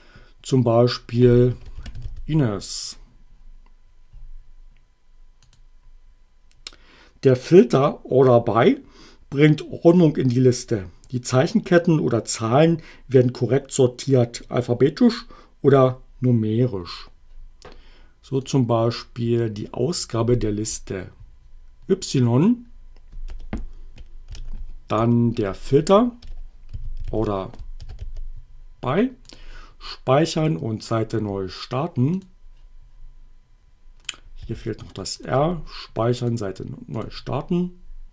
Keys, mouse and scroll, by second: 1.3-2.5 typing, 5.5 click, 18.5-20.2 drag, 20.8 BackSpace, 23.3 space, 24.3 alt+<, 25.1 space, 26.2-28.5 typing, 29.3 click, 30.5 click, 32.3 click, 34.1 click, 34.5 r, 35.2 click, 36.3 click.